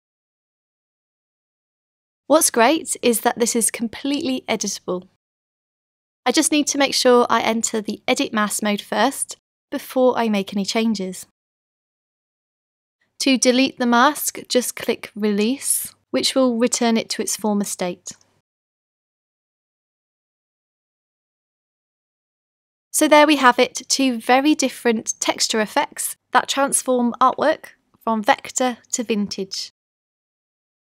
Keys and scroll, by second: 3.1 BackSpace, 4.7-6.2 typing, 9.2 super+0, 22.0 super+z.